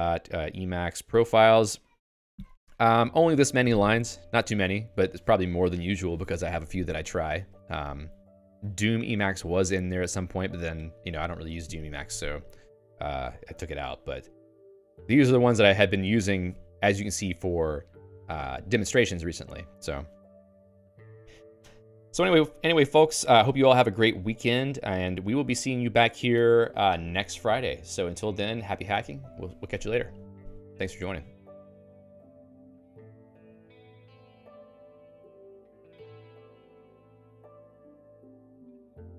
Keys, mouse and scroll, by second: 22.5 y, 24.7 y.